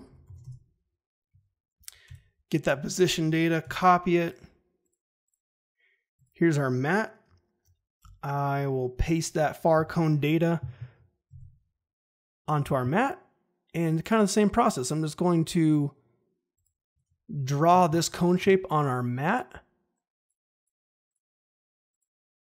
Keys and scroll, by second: 0.0-0.7 typing, 2.0 p, 3.6 ctrl+c, 7.9 p, 11.3 ctrl+v, 17.6 g.